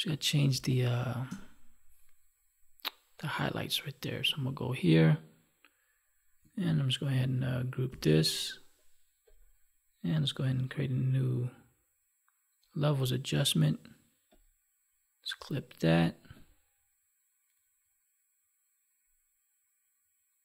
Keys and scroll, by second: 0.4 space, 7.8 ctrl+g.